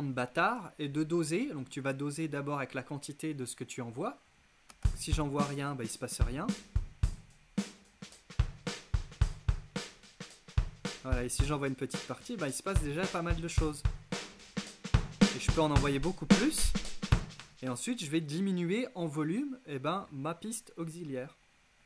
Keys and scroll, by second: 4.7 space, 17.1 space.